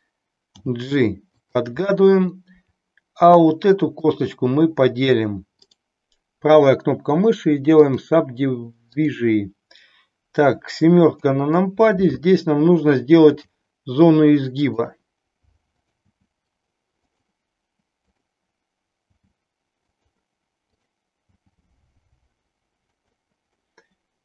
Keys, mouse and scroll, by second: 0.5 g, 1.5 click, 1.9-3.3 middle drag, 3.9 click, 5.8-8.0 right drag, 11.0 KP_7, 13.3 g, 15.8 click, 16.3 g, 19.0 g, 19.9 click, 21.3 g, 22.9 click, 23.6-24.2 middle drag.